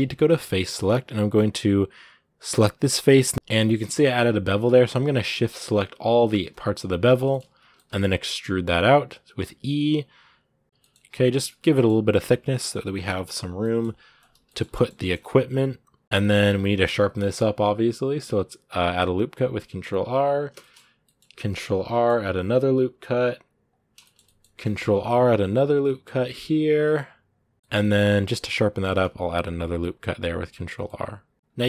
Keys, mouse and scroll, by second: 0.1-2.3 middle drag, 2.3 right click, 2.6 middle click, 2.9-3.3 scroll up 3, 3.3 middle click, 3.7 shift+middle click, 3.9 scroll up 2, 4.9 shift+right click, 5.1 middle click, 6.1 shift+right click, 6.7 scroll down 2, 6.8-7.9 shift+middle drag, 7.9 e, 11.2 middle click, 11.5 g, 14.3 shift+middle click, 14.8 g, 16.0 shift+middle click, 16.1 scroll up 1, 16.7 ctrl+r, 20.4 shift+middle click, 21.2 ctrl+r, 23.8 shift+middle click, 24.4 ctrl+r, 27.5 middle click, 27.8-28.7 scroll up 1, 28.7 ctrl+r, 30.6 middle click, 31.3 scroll down 2.